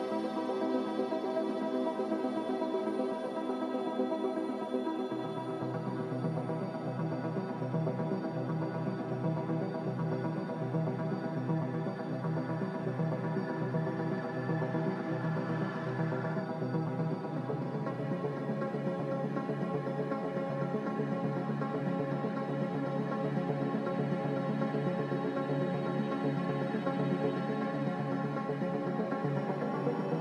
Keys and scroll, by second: 1.0 Return, 1.0 7, 4.3 ctrl+z, 8.5 ctrl+z, 25.9 ctrl+z, 29.2 ctrl+z.